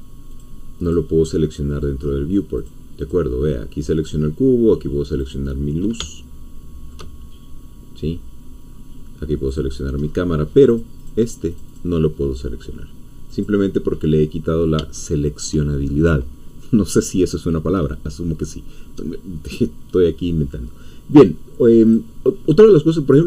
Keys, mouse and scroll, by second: 0.3 click, 0.9 click, 1.3 middle click, 2.0 scroll down 2, 2.3 middle click, 2.7 click, 4.1-6.0 drag, 7.1 shift+middle click, 7.1-7.5 shift+scroll down 2, 7.5-8.7 middle drag, 8.7 scroll down 2, 8.9 middle click, 9.5-10.0 drag, 10.0-10.7 scroll up 1, 10.7 click, 11.5 click, 13.3 click, 14.9 shift+middle click, 21.1 click, 21.8 click.